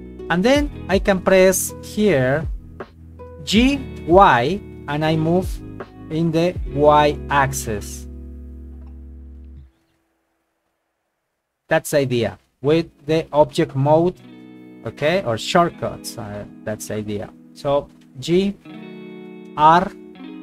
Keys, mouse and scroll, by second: 2.4 middle click, 3.5 g, 4.0 y, 10.0 click, 11.0 KP_1, 12.0 shift+middle click, 14.5 g, 18.1 g, 19.0 click, 19.5 r.